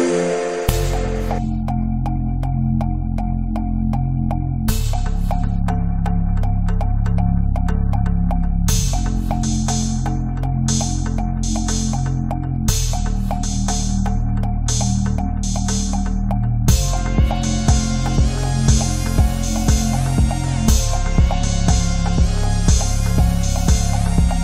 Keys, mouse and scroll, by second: 0.2 click, 1.1 space, 1.4 click, 2.1 space, 2.2 click, 2.2 space, 2.5 click, 3.8 space, 4.1 alt+click, 6.2 click, 7.9 i, 8.1 click, 9.9 ctrl+click, 10.8 click, 11.5 space, 11.6 ctrl+click, 12.5 ctrl+d, 12.8 space, 12.9 click, 13.0 space, 15.8-17.1 typing, 16.5 click, 16.9 click, 17.1-20.3 drag, 20.3 space, 21.4-24.1 drag, 24.1 ctrl+z, 24.3 click.